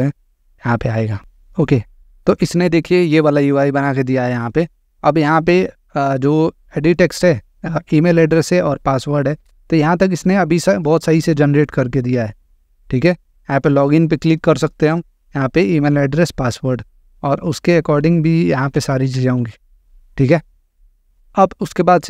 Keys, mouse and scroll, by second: 1.5 click, 4.3 click, 6.6 click, 8.4 click, 12.4 click, 14.3 click, 18.5-19.5 typing, 19.8 click.